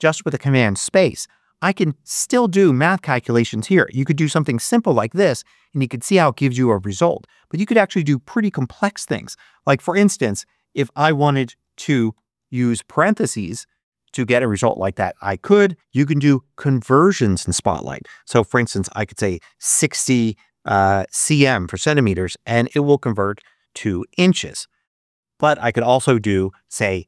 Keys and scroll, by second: 3.3-5.1 typing, 6.5 BackSpace, 9.9-12.9 typing, 19.4 6, 20.4-21.3 typing, 25.3 space, 25.6 a, 26.0 space.